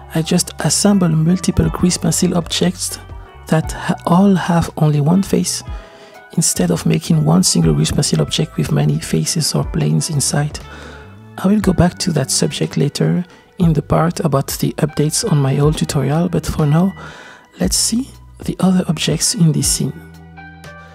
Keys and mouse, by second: 0.1 shift+d, 1.1 r, 3.2 middle click, 3.7-5.2 typing, 4.9 click, 6.2 click, 6.5 click, 6.7-7.7 middle drag, 6.7 g, 7.8 click, 8.4 shift+d, 8.9 x, 10.1 g, 11.0 r, 11.2 z, 13.5-16.1 typing, 13.8 click, 16.6-18.3 middle drag, 20.0 space, 20.4 space.